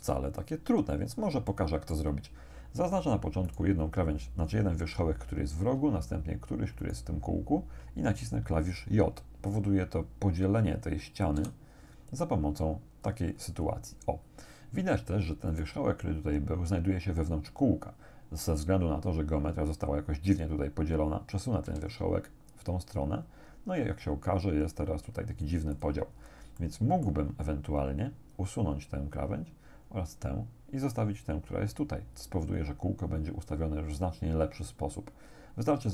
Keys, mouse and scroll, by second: 1.5 shift+click, 2.8 scroll up 2, 3.5 right click, 6.8 shift+right click, 11.4 j, 13.1-13.9 scroll up 2, 15.5 right click, 21.7 g, 25.8 click, 26.2 scroll down 2, 26.6 shift+click, 27.3 shift+scroll up 1.